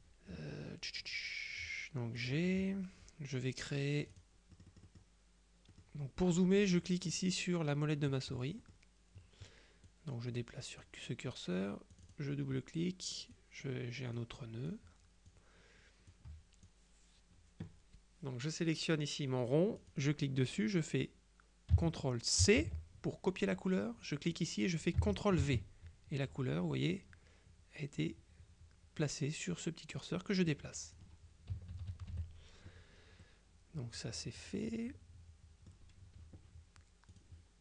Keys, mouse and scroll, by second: 2.3 click, 4.1-5.6 drag, 5.8 click, 8.7 click, 10.0-11.4 drag, 12.0 click, 13.4-15.9 drag, 16.2 click, 19.9 click, 22.5 ctrl+c, 24.4 click, 25.5 ctrl+v, 30.0-31.5 drag, 31.6 KP_Subtract, 33.3-36.3 drag, 37.2 click.